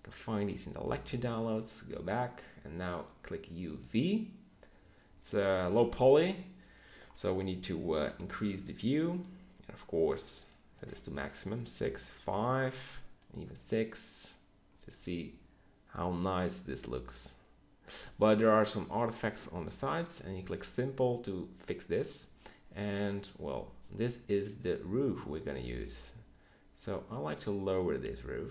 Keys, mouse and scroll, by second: 0.0-3.5 middle drag, 3.5-5.2 right drag, 5.2 Tab, 5.7 Tab, 17.5-19.5 middle drag, 24.0-24.9 middle drag.